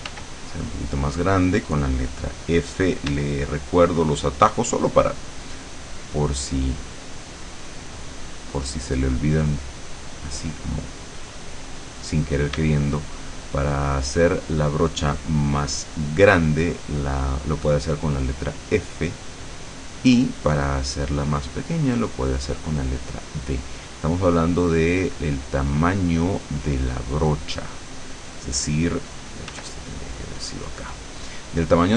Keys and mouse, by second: 0.3-4.5 drag, 3.1 d, 6.0-7.5 drag, 8.5-9.5 drag, 9.9-11.2 drag, 12.7 d, 13.1-14.9 drag, 16.9-22.4 drag, 24.5 click, 25.1 click, 27.0-28.9 drag, 29.1-31.9 drag, 29.6 f.